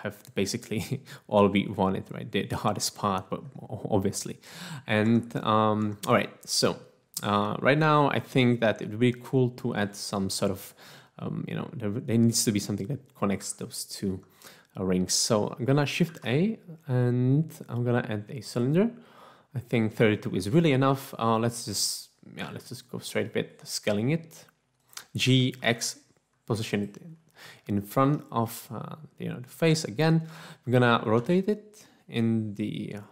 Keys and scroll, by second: 5.3 Tab, 5.8 Tab, 13.4 Tab, 14.1 Tab, 16.0 a, 22.5 s, 25.4-26.0 typing, 31.2 r.